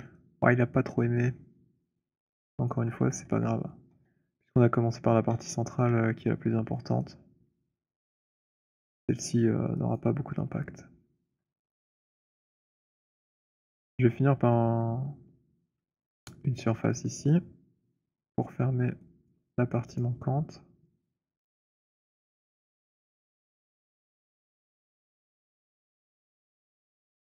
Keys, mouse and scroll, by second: 1.5 click, 2.1 alt+click, 2.7 alt+right click, 3.0 z, 3.3 z, 3.8 z, 5.2 z, 5.8 z, 8.7 alt+click, 9.8 alt+right click, 11.3 alt+click, 12.6 right click, 12.9 click, 13.7 alt+click, 15.0 alt+middle click, 16.1 alt+middle click, 16.5 alt+click, 18.1 click, 19.1 click, 19.9 shift+click, 21.6 alt+click, 22.6 shift+click, 23.8 click, 26.3 click.